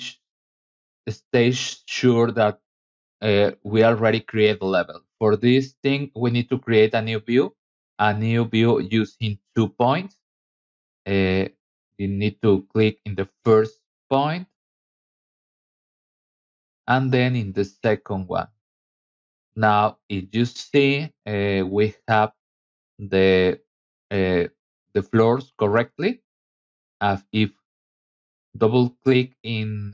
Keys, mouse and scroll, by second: 1.0 scroll up 2, 1.3 middle click, 2.3-2.6 scroll up 2, 3.1 scroll down 1, 3.8 middle click, 4.5 scroll up 1, 6.1 click, 11.1 click, 11.7 middle click, 15.5 click, 18.2 click, 19.4-20.2 scroll up 3, 20.6 scroll down 2, 21.0 middle click, 24.6-25.0 middle drag, 25.5 Escape, 25.7 Escape, 27.9 middle click, 28.9 middle click.